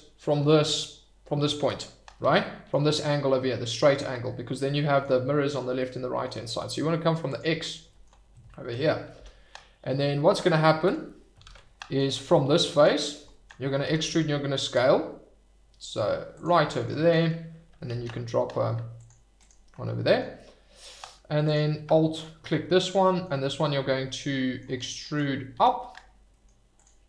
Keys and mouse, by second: 2.6 click, 4.2 middle click, 5.8 middle click, 7.3 click, 7.3 middle click, 9.1 e, 10.8 Escape, 11.4 ctrl+z, 11.7 middle drag, 12.6 shift+middle drag, 13.3 shift+middle click, 13.8 e, 14.0 s, 16.3 click, 16.8 shift+middle click, 17.9 ctrl+r, 19.4 click, 21.3 alt+middle click, 23.0 middle drag, 23.4-24.6 middle drag, 25.5 e, 26.3 middle click, 26.7 click.